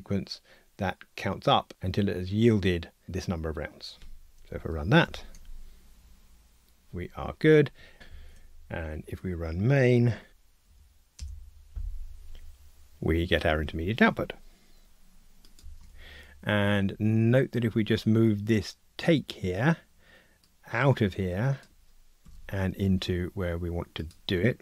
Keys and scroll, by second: 5.0 ctrl+r, 10.3 ctrl+alt+r, 22.2 super+x.